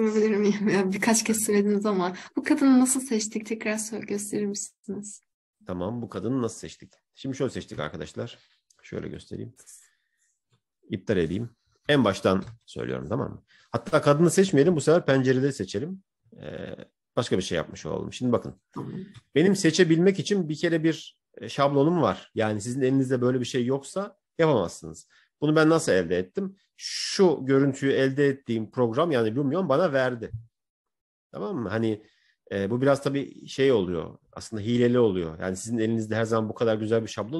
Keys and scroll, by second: 8.9 Escape, 12.3 ctrl+-, 15.3 ctrl+-.